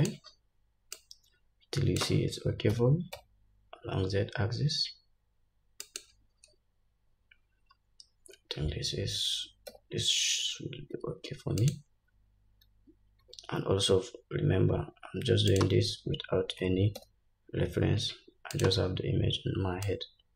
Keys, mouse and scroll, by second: 1.1-6.1 drag, 2.9 s, 7.9-8.6 scroll up 1, 8.6-9.5 scroll up 1, 9.5 r, 13.4 r, 16.7 g, 20.0-20.3 drag.